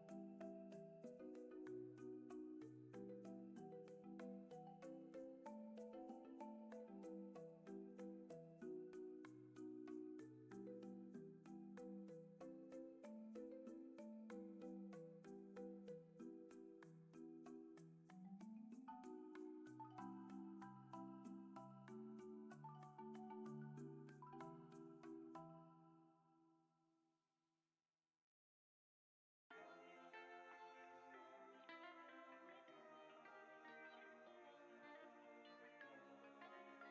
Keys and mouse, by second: 5.9-9.7 shift+middle drag, 10.2 ctrl+s, 12.2 r, 24.3-26.4 drag, 28.9 F5, 28.9 F6, 31.4 F3, 32.8-33.9 drag, 36.1-36.9 drag.